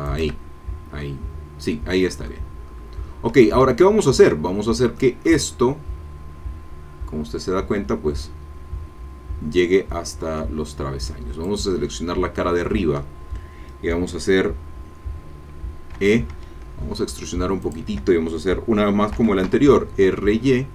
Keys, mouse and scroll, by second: 0.1 shift+click, 0.7-1.0 shift+scroll down 3, 1.0-3.2 middle drag, 2.7 scroll up 2, 3.4-4.5 shift+drag, 4.5 shift+middle click, 5.0 shift+click, 11.7 click, 15.9 e, 17.7 shift+click, 19.1 r, 19.4 y.